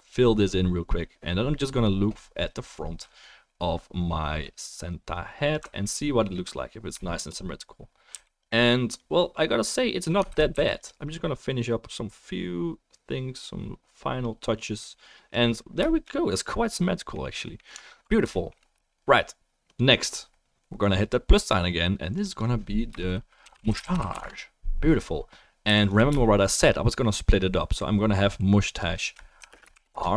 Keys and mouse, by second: 5.8 alt+middle click, 6.5-8.5 middle drag, 7.0-9.0 shift+drag, 7.0-8.5 shift+right drag, 8.1 f, 10.3 ctrl+z, 10.5 f, 10.8 click, 17.9 alt+middle click, 22.2 click, 25.6 f, 25.9-28.6 shift+drag.